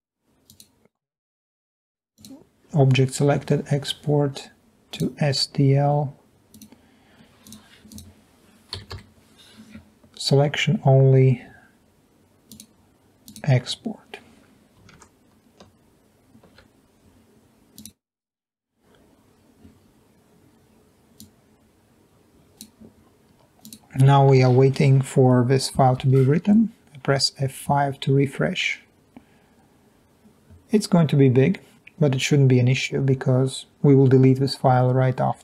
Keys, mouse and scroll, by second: 7.4 click, 7.9 click, 8.9 Delete, 9.0 Delete, 12.5 click, 13.3 click, 16.5 alt+Tab, 25.8 F5.